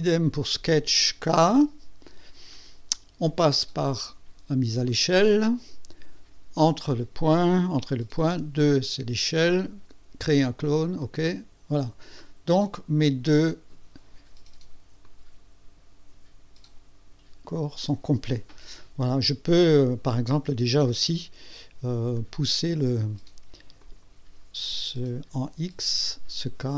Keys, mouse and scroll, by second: 4.9 click, 6.6 click, 7.0 click, 8.3 KP_2, 11.2 click, 12.1-12.4 scroll down 1, 12.5 scroll up 1, 15.0-17.7 drag, 22.2 click, 22.8 click, 23.8 click, 24.3 click, 25.8-26.7 scroll down 4.